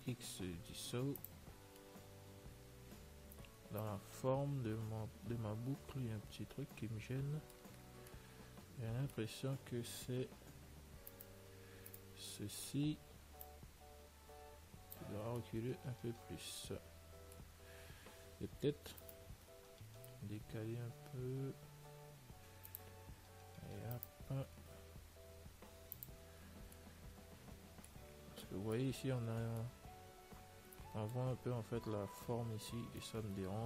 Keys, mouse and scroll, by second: 0.4 x, 2.1-4.2 middle drag, 10.0 middle click, 11.4-14.0 right drag, 12.6-14.3 middle drag, 13.7 click, 15.8-17.5 middle drag, 19.3-21.2 right drag, 24.2-26.0 right drag, 26.7 Tab, 26.9-33.6 middle drag.